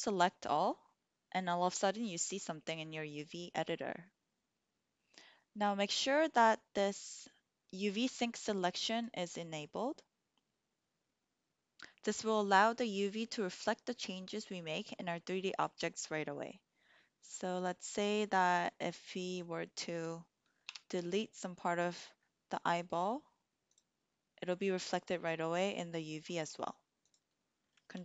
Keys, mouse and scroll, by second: 3.1-8.8 middle drag, 17.9 click, 20.6 Delete, 26.9 click, 27.8 ctrl+z.